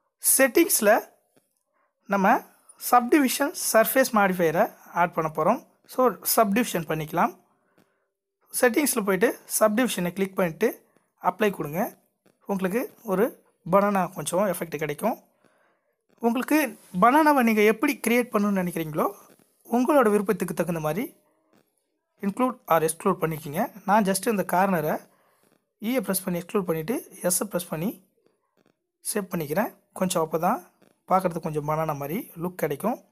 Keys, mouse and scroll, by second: 4.0-5.1 drag, 11.8 g, 15.8 scroll up 2, 16.2 e, 18.8 s, 24.3 e, 27.1 click, 27.6 alt+click, 32.7 s.